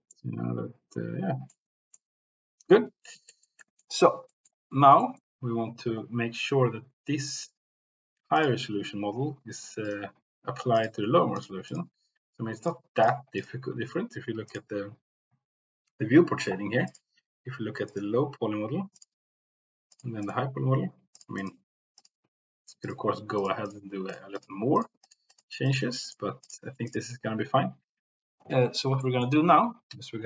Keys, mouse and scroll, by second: 0.1-1.5 middle drag, 1.9-2.7 middle drag, 3.2 shift+middle click, 3.6-3.9 middle drag, 4.2 middle click, 5.0 shift+middle click, 7.2 middle click, 8.3 click, 9.8 click, 10.7 click, 11.3 click, 11.6 click, 12.6 click, 13.0 click, 13.3 click, 14.4 click, 16.8 click, 17.9 click, 18.9 click, 19.9 click, 20.1 click, 21.0 click, 21.4 click, 21.9 click, 22.8 click, 23.3 click, 23.6 click, 24.0 click, 24.3 click, 24.6 click, 25.6 click, 26.0 click, 26.4 click, 26.9 click, 28.9 middle click.